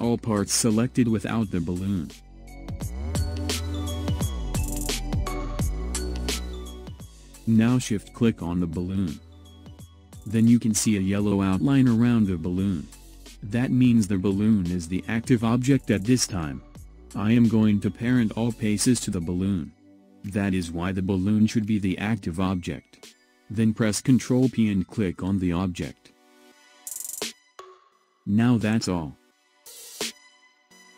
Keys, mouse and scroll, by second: 1.9-4.9 middle drag, 8.6 shift+click, 10.1-10.6 scroll down 2, 10.6-13.5 middle drag, 13.5-14.2 scroll up 1, 14.2-17.2 middle drag, 20.1-23.2 middle drag, 23.7 ctrl+p.